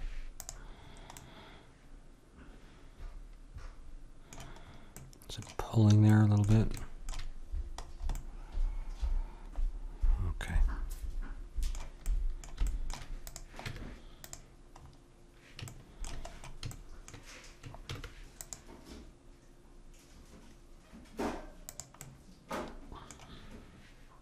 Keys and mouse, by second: 1.2-3.1 middle drag, 5.0-10.0 middle drag, 12.1-13.6 middle drag, 13.3-15.7 drag, 13.6 Tab, 14.8-19.4 middle drag, 17.9 ctrl+r, 22.0-24.2 middle drag.